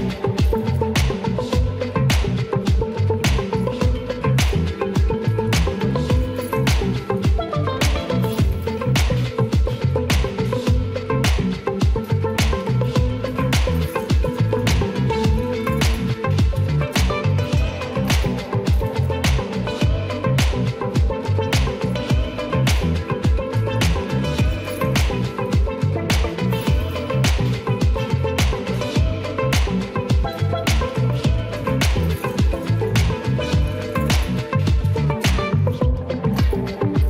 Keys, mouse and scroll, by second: 0.3 shift+middle drag, 0.6 Tab, 1.4 shift+a, 3.8-4.5 drag, 5.7 click, 6.2-9.1 right drag, 9.8-10.6 middle drag, 11.3 s, 12.3 click, 13.5 shift+middle click, 13.8-14.3 middle drag, 19.0 middle drag, 19.8 shift+middle click, 20.1 middle click, 20.9 w, 21.3 shift+middle drag, 21.7 middle click, 22.6 ctrl+s, 23.1 shift+middle click, 25.4 click, 25.8 Tab, 27.0 2, 27.3 click, 29.2 shift+middle click, 29.9 middle click, 32.1 middle click, 33.3 q, 36.8-37.0 shift+middle drag.